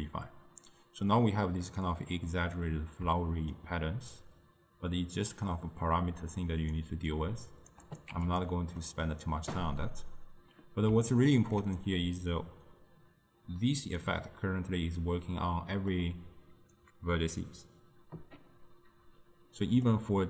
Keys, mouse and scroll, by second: 3.6-6.8 shift+drag, 7.2-8.4 shift+drag, 8.9-17.2 middle drag, 19.7 d, 19.9-20.2 drag.